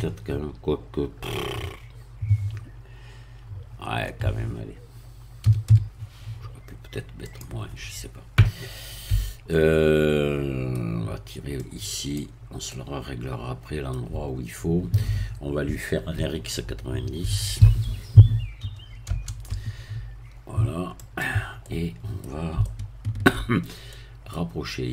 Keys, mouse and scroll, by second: 3.8 BackSpace, 5.4 3, 5.6 2, 7.3 click, 8.1 scroll up 1, 9.1 Tab, 9.5-10.9 middle drag, 11.6 click, 12.7-14.1 middle drag, 17.2 r, 17.6 x, 18.6 9, 19.0 0, 21.0 click, 21.6 middle click, 22.6 shift+middle click, 23.6-23.9 shift+scroll up 1, 23.9 middle click.